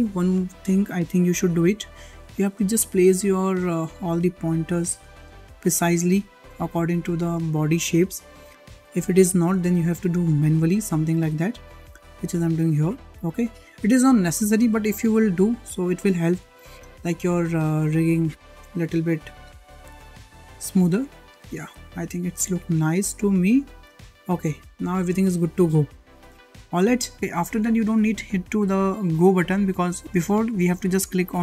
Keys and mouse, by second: 1.7-2.2 shift+middle drag, 3.2 drag, 4.7 click, 5.5 drag, 6.5 click, 8.3 `, 9.6 shift+middle click, 10.7 drag, 12.1 shift+middle click, 12.5 click, 14.0 click, 14.8 click, 16.2 shift+middle drag, 17.7 click, 18.0 shift+middle drag, 18.9-20.7 drag, 21.2-21.5 drag, 22.4 click, 22.9 click, 24.5 `, 25.9 middle click, 27.2 `.